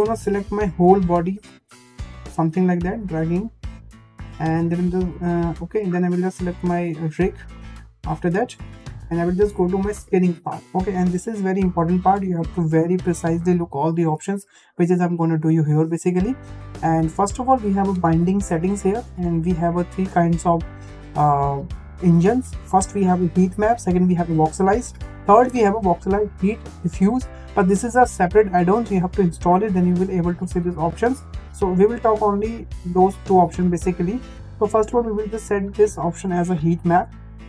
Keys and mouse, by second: 0.6-2.2 drag, 9.9 click, 19.7-31.5 drag, 32.3-34.1 drag.